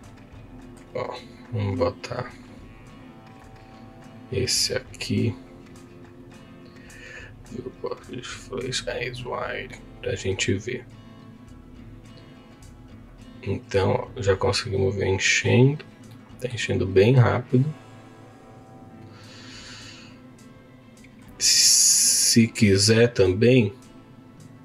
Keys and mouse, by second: 1.3 click, 4.1 click, 5.5 click, 7.1-8.2 drag, 9.5 click, 10.2 click, 12.5 click, 15.6 click, 16.1 middle click, 17.7-21.3 drag, 21.6 middle click.